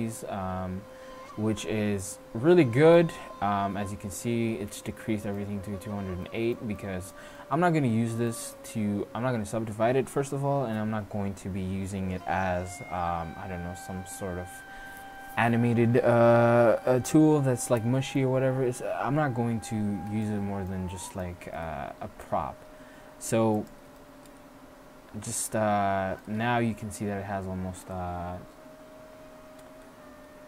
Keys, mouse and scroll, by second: 2.8 middle click, 6.7 middle click, 7.7-9.7 middle drag, 20.5-23.7 middle drag, 22.8 e, 24.3 middle click, 25.5 click, 29.1 Tab.